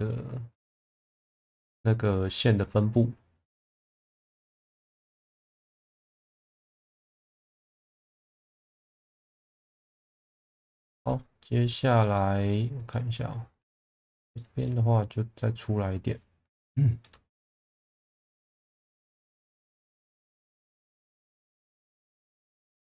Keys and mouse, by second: 0.0 click, 0.5 click, 3.0 click, 10.9-11.7 middle drag, 12.2 middle click, 14.0 click, 14.3 middle click, 16.5 middle click, 18.0 click, 18.5 click, 19.1 click, 21.2 click, 22.6-22.8 middle drag.